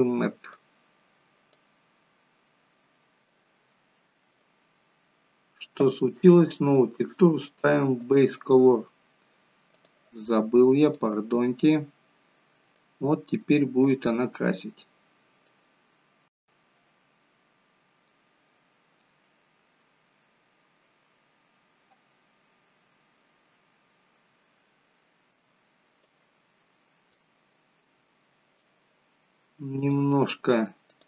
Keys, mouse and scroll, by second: 2.1 middle click, 3.6 shift+middle click, 6.5 click, 11.3 click, 13.1 scroll down 3, 21.5-22.2 scroll up 2, 22.2-22.6 scroll down 2, 23.6-24.0 scroll up 2, 24.3 shift+middle click, 27.5 click, 29.7 click, 30.8 click.